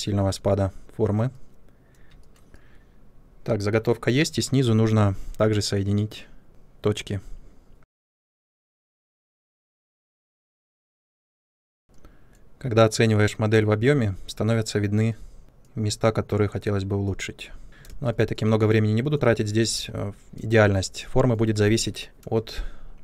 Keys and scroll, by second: 2.0 space, 5.0 1, 8.2-11.3 typing, 17.8 ctrl+space, 20.5 space.